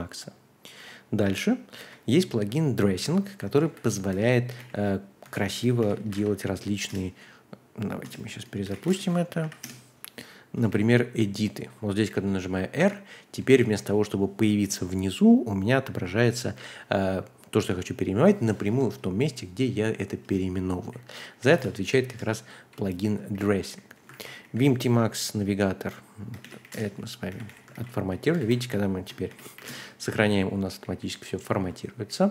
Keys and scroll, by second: 1.8 super+c, 3.0 a, 3.4 Return, 3.6 super+v, 4.1 Escape, 4.4-6.6 typing, 5.2 Escape, 6.9 Return, 8.0 Return, 8.4-9.3 typing, 9.4 Page_Up, 9.6 Return, 10.4-12.1 typing, 18.6 Escape, 19.8-24.4 typing, 20.2 Return, 21.5 Return, 22.0 Return, 23.3 ctrl+d, 24.1 ctrl+u, 26.2-28.1 typing, 27.7 ctrl+d, 28.4 ctrl+u, 29.3 shift+;, 29.5 w, 29.7 Return, 30.2 j, 30.8 j, 31.4 ctrl+d, 31.9 j, 32.1 j, 32.2 j.